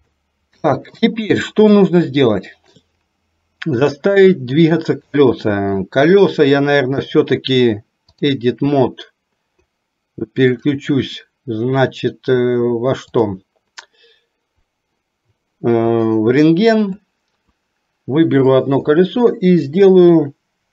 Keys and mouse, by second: 0.1 shift+middle click, 1.9 shift+middle click, 4.5 middle click, 7.1-8.4 drag, 17.3 click.